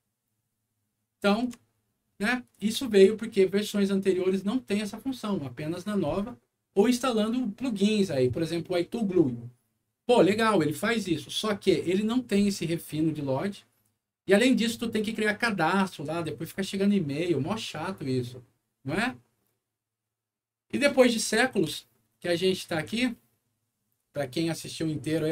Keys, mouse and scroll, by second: 1.7 scroll down 1, 2.1 scroll up 1, 2.2 alt+middle click, 2.7 alt+middle click, 21.1 middle click, 21.7-22.7 alt+middle drag, 23.1 alt+middle click, 24.5 alt+click.